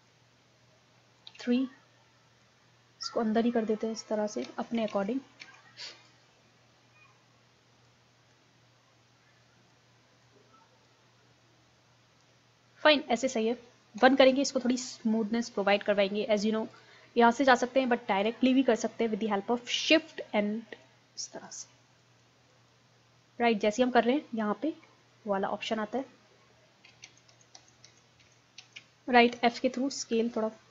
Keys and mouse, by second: 0.0 ctrl+z, 1.3 KP_3, 2.4-3.5 drag, 4.5 ctrl+z, 5.0 ctrl+z, 5.4 ctrl+z, 6.1-8.0 drag, 8.3-10.0 drag, 10.3 click, 11.2-13.3 middle drag, 14.0 KP_1, 16.8-18.6 drag, 20.8-23.5 drag, 26.0-27.0 drag, 27.1 ctrl+z, 27.4 ctrl+z, 27.6 ctrl+z, 27.9 ctrl+z, 28.2 ctrl+z, 28.6 ctrl+z, 29.3 f, 30.0-30.7 drag.